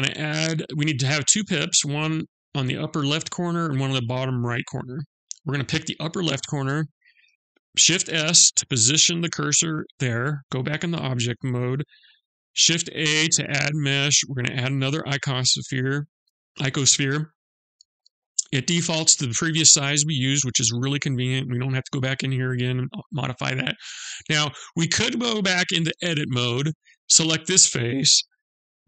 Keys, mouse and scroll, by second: 4.6 click, 7.5 shift+s, 10.4 Tab, 12.1 shift+a, 16.7 shift+a, 16.7 shift+a, 17.2 shift+a, 24.4 click, 25.4 Tab, 26.5 click, 28.4 shift+a.